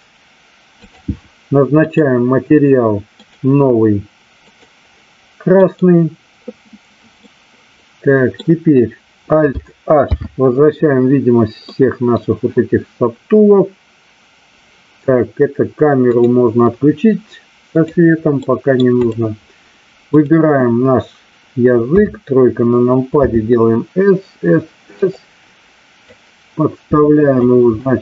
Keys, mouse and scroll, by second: 1.7 click, 3.3 click, 4.5 click, 7.3-8.4 middle drag, 10.0 alt+h, 11.6-12.1 middle drag, 16.1 click, 17.7 click, 18.4-18.7 middle drag, 20.1 click, 21.9 KP_3, 23.1 s, 26.1-27.4 drag.